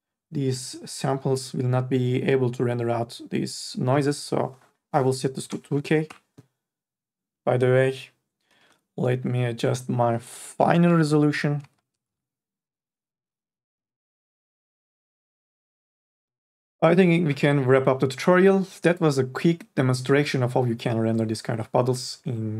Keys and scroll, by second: 5.7 KP_2, 5.7 KP_4, 6.1 KP_8, 6.3 Return, 10.3-12.3 typing.